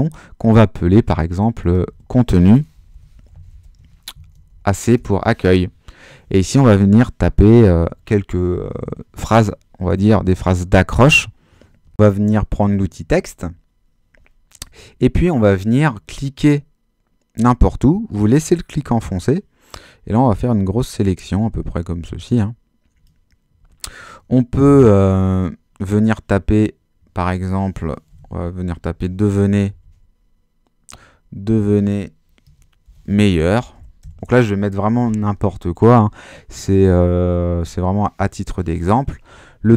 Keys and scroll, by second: 1.8-4.8 typing, 4.9 Return, 24.6 super+h, 27.8-30.2 typing, 31.5-34.5 typing.